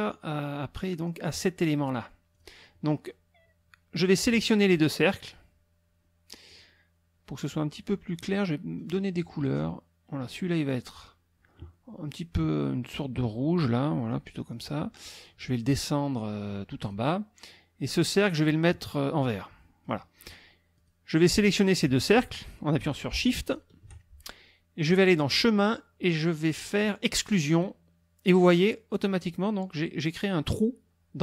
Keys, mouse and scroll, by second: 1.0 click, 2.3 click, 4.4 shift+click, 6.5 click, 8.2 click, 10.2 click, 14.5 click, 16.9 click, 18.2 click, 19.9 click, 20.8 click, 23.5 shift+click, 25.0 click, 27.5 click.